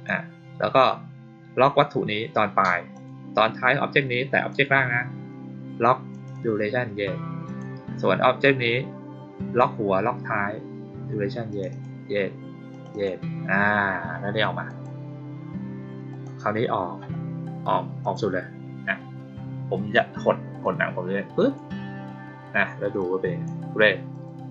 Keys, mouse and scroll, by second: 2.8 click, 4.3 click, 6.0 click, 6.2 click, 7.4 click, 11.4 click, 11.6 click, 12.6 click, 12.8 click, 14.6 click, 16.0 click, 17.9 click, 20.5 click, 22.9 click, 24.0 click.